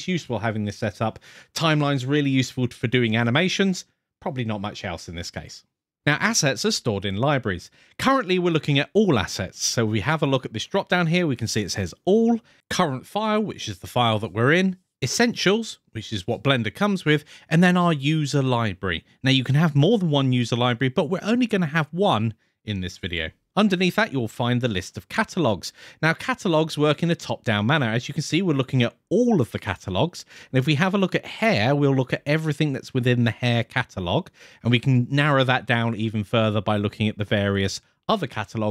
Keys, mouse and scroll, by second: 11.4-12.6 drag, 31.3 click, 32.0 click, 33.0-34.4 scroll down 2, 35.7 click, 36.3 click, 36.8 click, 37.4 click.